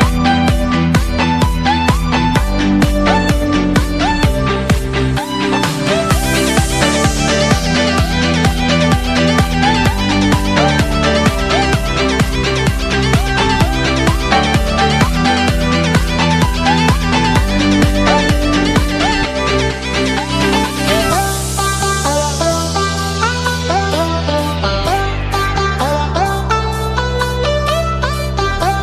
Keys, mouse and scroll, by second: 4.2-4.7 middle drag, 5.4-5.8 middle drag, 7.4-13.4 middle drag, 13.4-28.8 drag.